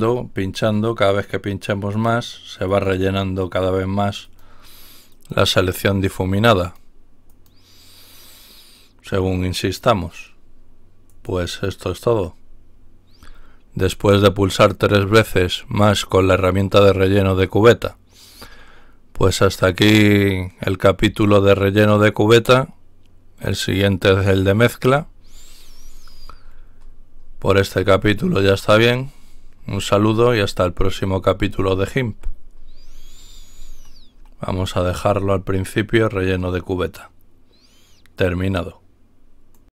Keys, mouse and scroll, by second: 1.1 click, 1.9 click, 2.7 click, 3.8 click, 4.2 click, 5.1 click, 5.8 click, 6.6 click, 7.2 click, 11.0 click, 18.4 scroll down 2, 24.9-26.8 scroll up 2, 26.8-27.9 scroll up 1, 27.9-29.5 scroll up 1, 29.5-30.8 scroll up 1, 30.8-31.4 scroll up 1, 31.4-33.4 scroll up 1, 33.4-34.0 scroll up 1, 34.0-35.8 scroll up 1, 39.5 click.